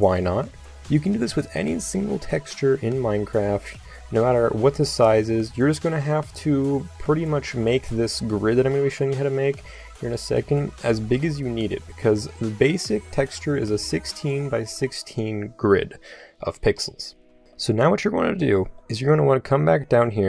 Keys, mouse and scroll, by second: 0.8-8.8 drag, 8.8-16.8 middle drag, 16.8 click, 17.7-18.9 middle drag.